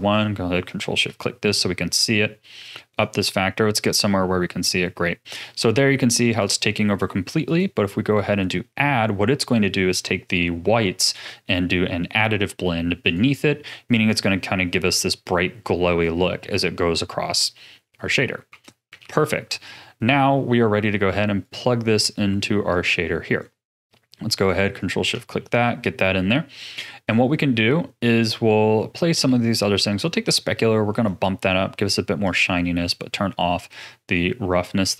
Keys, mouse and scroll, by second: 0.6 ctrl+shift+click, 1.2 middle click, 1.8-2.6 scroll up 5, 2.6-6.4 drag, 7.4-10.6 drag, 14.5 scroll down 2, 16.0-19.0 drag, 19.0 ctrl+s, 19.4-20.3 scroll down 7, 20.3-21.4 middle drag, 21.4 click, 22.7 click, 24.3 click, 24.7 ctrl+shift+click, 25.3 middle click, 26.0 click, 27.4-28.5 scroll up 4, 28.5-30.0 middle drag, 30.0-34.9 drag.